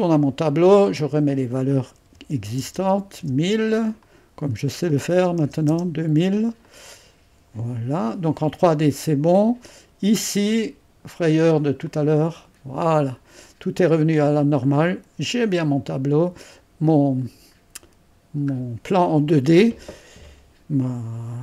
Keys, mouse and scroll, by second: 1.9-3.2 typing, 4.0-5.2 drag, 4.6-6.2 typing, 6.7-13.1 drag, 13.1-14.2 scroll down 1, 14.7-17.3 scroll up 1.